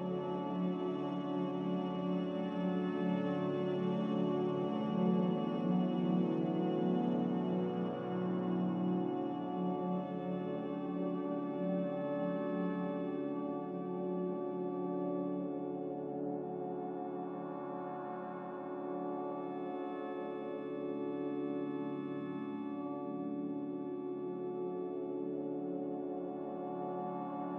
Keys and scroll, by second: 1.4 a, 2.0 5, 2.9 1, 11.0 n, 22.8 a.